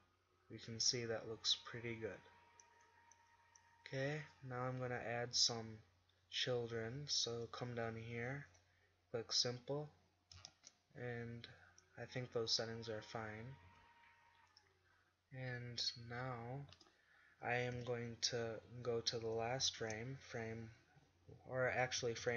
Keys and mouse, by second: 0.1-2.1 middle drag, 4.9 z, 5.4 z, 10.6 shift+z, 13.7 z, 16.8 z, 17.9 KP_7, 19.9 shift+Right, 22.1-22.3 Left.